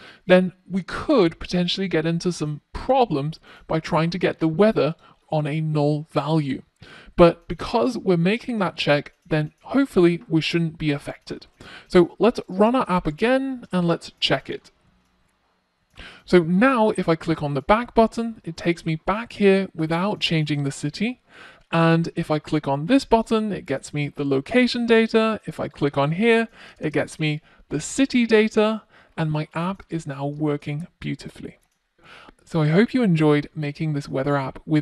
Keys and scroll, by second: 9.1 super+s, 10.6 super+s.